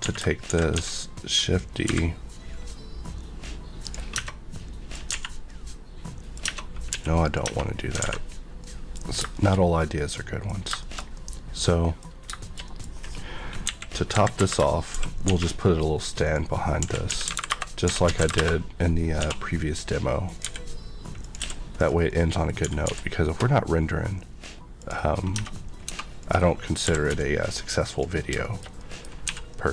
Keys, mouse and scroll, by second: 0.0-0.7 typing, 1.8 y, 3.8 click, 4.1 Tab, 4.2 middle click, 5.3 a, 5.5 middle click, 6.5 Tab, 6.9 x, 7.2 click, 7.4 Tab, 7.8 scroll down 1, 8.0 alt+a, 8.6 middle click, 9.0 scroll down 1, 9.3 shift+middle click, 12.1 scroll up 2, 12.4 shift+middle click, 13.0-13.4 scroll down 1, 13.6 KP_1, 14.3 KP_5, 14.9 shift+c, 15.4 a, 16.2 click, 16.8-19.2 typing, 17.4 KP_Enter, 18.3 KP_Enter, 20.2 click, 20.4 g, 21.2 click, 21.4 s, 21.7 click, 22.1 middle click, 22.5 scroll up 1, 22.6 g, 24.8 click, 25.2 scroll down 1, 25.3 Tab, 25.9 2, 26.2 click, 26.6 scroll down 1, 26.8 e, 27.0 x, 27.8 click, 28.3 shift+scroll down 1, 28.4 shift+middle click, 28.8 middle click, 29.2 3, 29.5 middle click.